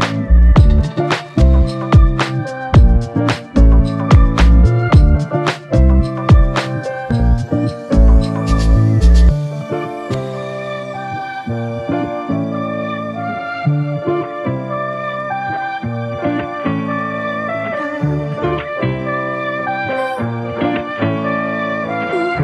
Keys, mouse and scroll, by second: 2.9 alt+click, 5.6 ctrl+click, 9.0 alt+click, 12.6 ctrl+click, 14.0 ctrl+click, 16.7 alt+click, 18.5 ctrl+click.